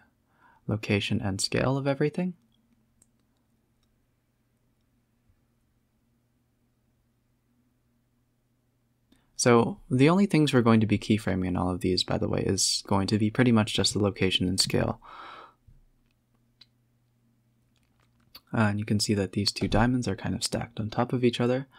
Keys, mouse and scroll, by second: 0.0 click, 0.8 s, 3.4 space, 3.9 space, 4.6-6.9 drag, 9.0-9.5 scroll down 10, 9.5-10.0 scroll up 11, 10.1-10.5 scroll down 7, 10.5 s, 13.1-13.5 scroll up 14, 13.7 click, 14.0-14.6 scroll down 9, 15.3-16.4 drag, 16.4-16.9 scroll up 14, 16.9 z, 17.4 shift+click, 17.8 click, 18.6-19.1 middle drag, 19.1 b, 19.9 shift+click, 20.0 shift+click, 20.4 middle click, 20.6 g, 21.1-21.7 scroll down 3.